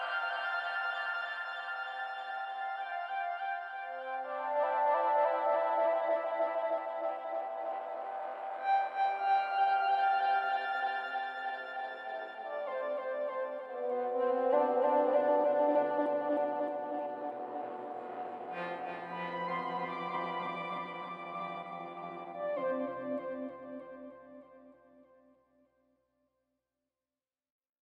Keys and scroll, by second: 6.7 ctrl+alt+shift+e.